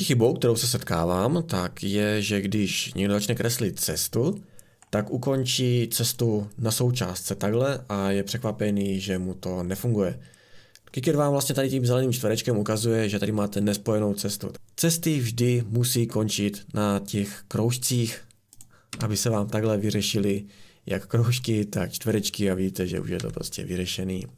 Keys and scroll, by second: 18.9 Escape, 23.2 Delete.